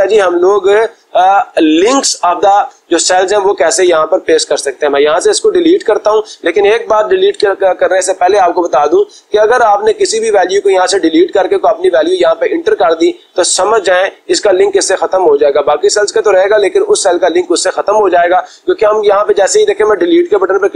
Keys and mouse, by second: 1.4 click, 3.8 Delete, 7.3 ctrl+z, 9.3-10.5 drag, 10.8-12.1 drag, 13.6 click.